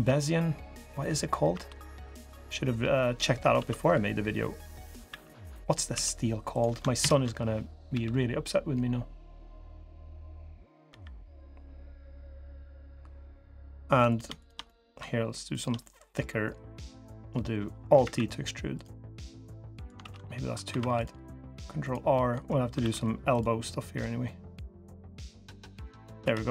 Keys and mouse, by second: 1.3 i, 2.7 click, 3.3 alt+s, 4.8 e, 5.7 s, 6.7 ctrl+KP_Add, 7.7 g, 10.6 l, 13.1 drag, 14.4 click, 15.6 click, 16.8 click, 17.8 alt+e, 19.8 ctrl+z, 20.4 ctrl+r, 21.9 click, 22.5 ctrl+r, 25.6 click, 26.0 3.